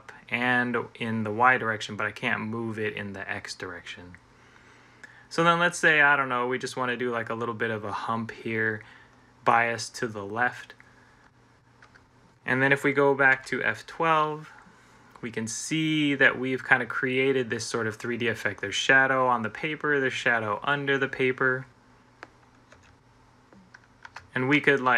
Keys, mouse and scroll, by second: 11.6 Tab, 13.1 F12, 22.6 Escape, 23.9 Tab.